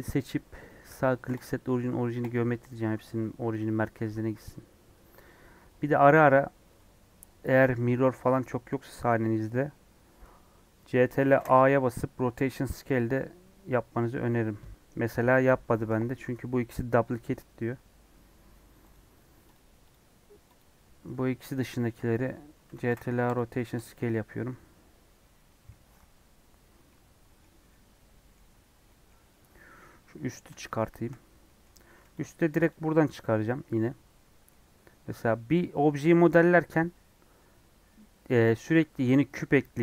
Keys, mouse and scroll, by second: 2.3-3.5 right drag, 3.5 click, 3.7 middle click, 4.7-6.9 scroll down 3, 7.8 a, 18.9 click, 19.9 click, 20.5 click, 22.1 click, 23.3 ctrl+a, 23.8 click, 24.1 middle click, 24.7-25.0 scroll up 4, 27.5 scroll down 3, 27.6-31.2 middle drag, 31.2 scroll up 3, 31.4 middle click, 31.7 Tab, 32.2 click, 32.3 Tab, 32.6 click, 33.6 Tab, 34.2 scroll up 3, 34.4 middle click, 35.0 scroll down 4, 35.2-39.8 middle drag.